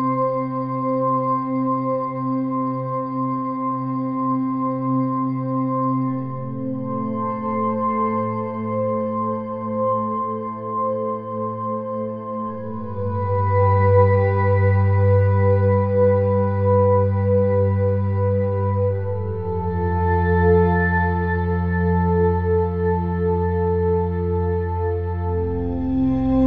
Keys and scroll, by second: 3.0 -, 6.2 [, 7.8 b.